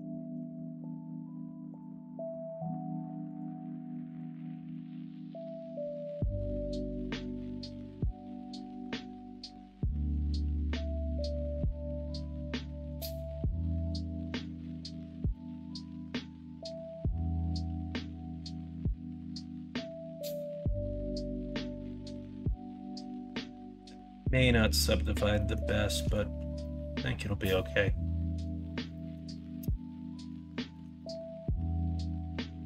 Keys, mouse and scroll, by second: 0.0 alt+z, 0.4 alt+z, 0.7 middle click, 2.1 Tab, 2.6 middle click, 3.8 3, 4.3 middle click, 5.2 middle click, 11.7 middle click, 14.3 middle click, 15.2 s, 21.4 Tab, 22.1 middle drag, 22.9 middle drag, 23.7 middle drag, 23.8 middle click, 25.3 middle drag, 25.9 middle drag, 26.6-28.4 middle drag, 28.9 middle drag, 29.6-30.2 middle drag, 30.5 shift+middle drag, 30.9-32.6 middle drag.